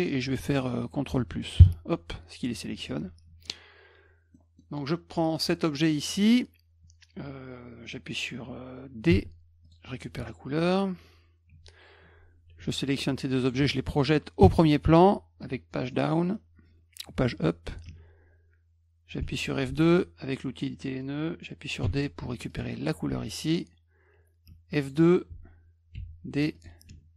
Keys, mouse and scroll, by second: 4.3 middle click, 5.4 click, 9.1 d, 9.6 click, 11.5 F1, 13.4 shift+click, 15.9-16.3 middle drag, 17.8 F2, 19.5 click, 21.8 d, 22.5 click, 24.5 F2, 24.8 click, 25.9 d, 26.5 click.